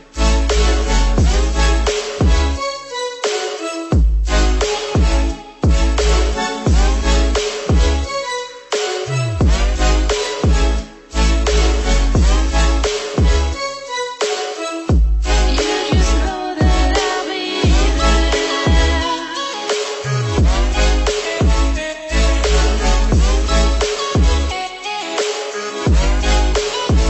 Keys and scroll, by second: 6.3 ctrl+-, 6.8 ctrl+=.